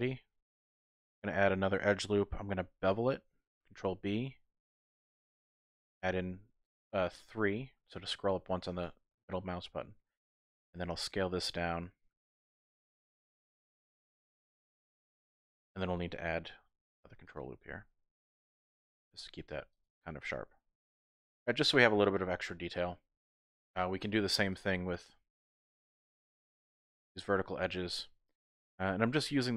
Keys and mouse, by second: 0.5 click, 2.6 ctrl+b, 5.2 click, 5.7-6.9 drag, 8.6-9.3 typing, 8.8 alt+click, 9.5 middle click, 10.9 s, 14.1-14.9 typing, 14.3 click, 14.6 middle click, 16.7 ctrl+r, 19.7 click, 20.6 Tab, 21.0-23.6 middle drag, 23.8 Tab, 24.5 alt+click, 25.9 alt+click, 27.2 middle click, 27.8 shift+middle click.